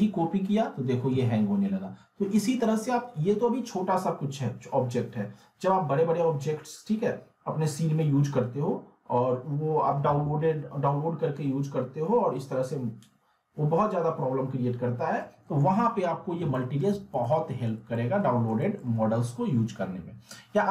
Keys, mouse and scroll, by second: 16.5 middle click, 16.9 z, 17.5-17.8 alt+middle click, 17.7 scroll down 1.